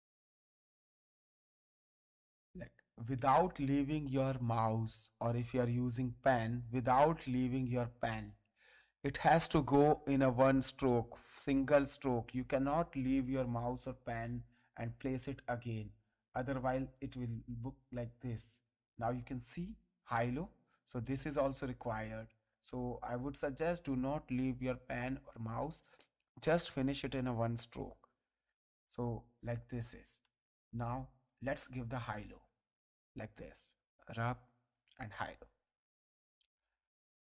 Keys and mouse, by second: 16.9 click, 18.3 space, 18.4 click, 20.0 click, 30.2 space, 30.7 ctrl+click, 32.2 click, 35.0 click, 36.4 click.